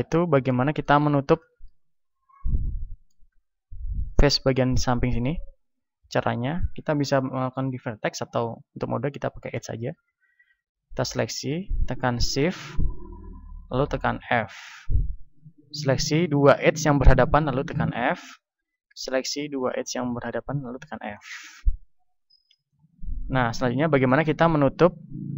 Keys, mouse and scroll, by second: 3.7 a, 6.1 ctrl+Tab, 7.9-9.0 middle drag, 9.6-13.8 right drag, 13.8-15.0 middle drag, 13.8 f, 15.0-17.8 right drag, 17.8 f, 18.4-23.3 right drag, 20.4 f, 21.1 middle click, 22.3 ctrl+Tab, 23.7-25.3 middle drag.